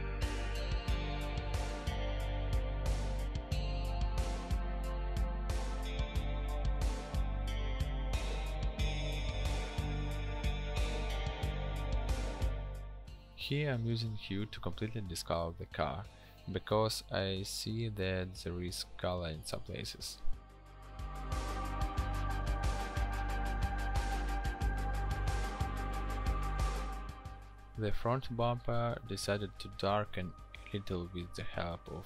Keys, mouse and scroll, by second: 2.0 ctrl+j, 3.0 ctrl+click, 14.1 ctrl+u, 19.7 ctrl+u, 27.5 ctrl+u.